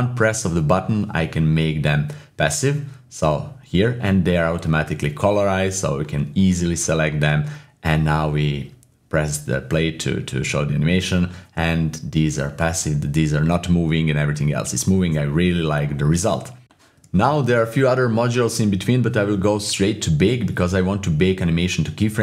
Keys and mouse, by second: 0.7 typing, 2.3 click, 2.3-3.6 typing, 2.6 ctrl+shift+z, 2.6 shift+click, 3.8 middle click, 4.5 click, 4.9 typing, 5.0 middle click, 5.3 click, 5.8 click, 6.3-10.0 typing, 6.6 click, 7.3 drag, 8.6 drag, 9.2 click, 16.6 middle click, 18.0-21.3 drag.